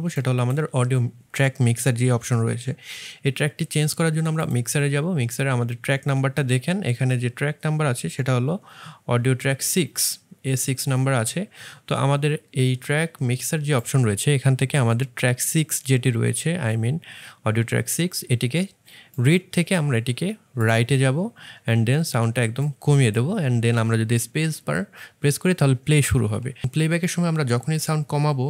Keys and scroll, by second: 8.7 1.